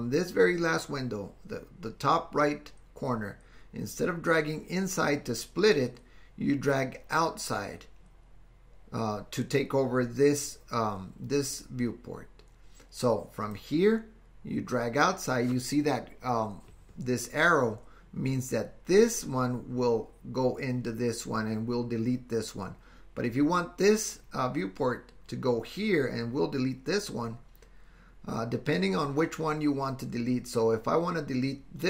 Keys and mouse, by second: 13.6-31.8 drag.